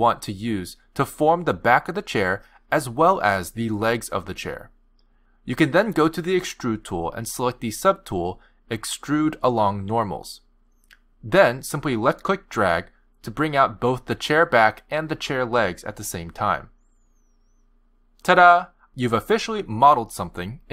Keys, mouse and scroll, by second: 1.5 click, 2.0 shift+click, 2.7 click, 2.9 middle click, 3.9 shift+click, 4.4 shift+click, 4.9 shift+click, 5.8 shift+click, 6.0 middle click, 8.0 click, 11.1-11.5 scroll down 2, 11.5 click, 14.2 middle click, 15.2 g, 16.9 scroll down 2, 17.2 shift+scroll up 1, 17.5 shift+middle click.